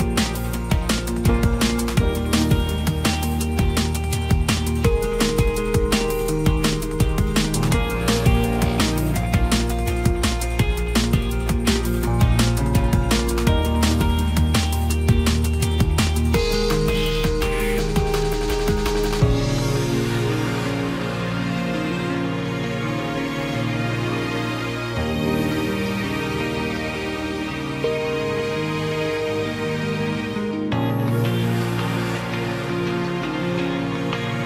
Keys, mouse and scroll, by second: 9.4 ctrl+t, 15.6 ctrl+j, 26.6 ctrl+t.